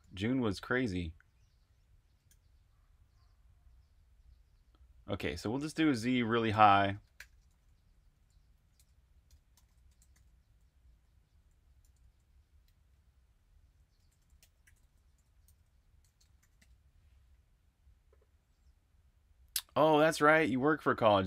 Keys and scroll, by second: 0.0-0.4 typing, 2.2 h, 6.9-10.9 typing, 12.6-16.5 typing, 17.7-18.5 typing.